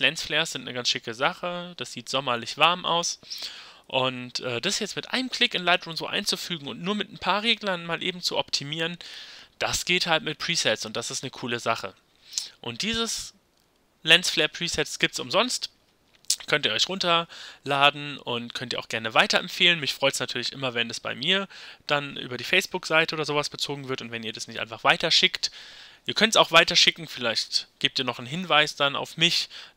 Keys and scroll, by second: 4.0 y.